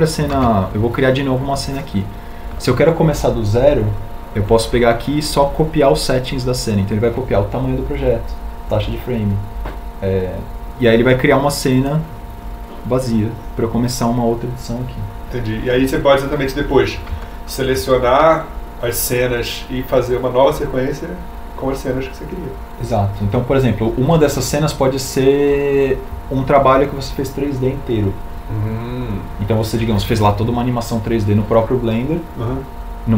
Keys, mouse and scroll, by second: 19.2 shift+Tab.